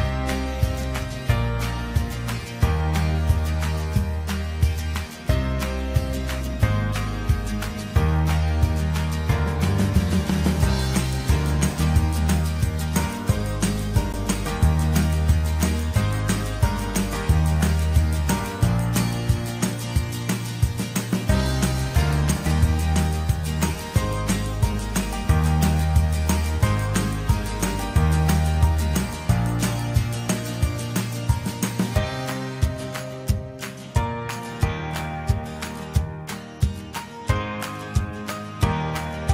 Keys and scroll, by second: 1.1 BackSpace, 31.6 ctrl+t, 38.9 ctrl+j.